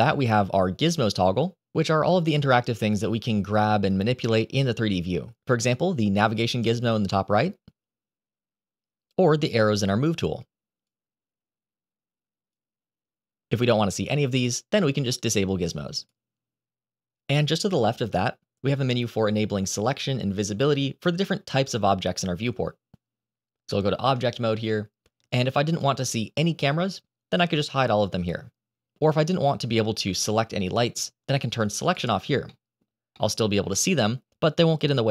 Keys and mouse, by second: 6.6-8.0 drag, 9.5 click, 19.1 click, 23.9 Tab, 25.2-32.8 drag, 33.0-34.0 middle drag.